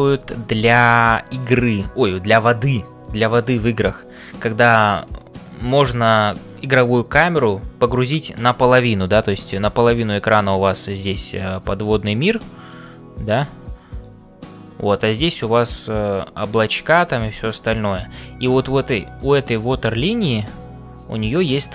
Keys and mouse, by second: 0.0-21.7 typing, 9.9-14.4 drag, 15.3-16.5 drag, 17.0-21.7 drag.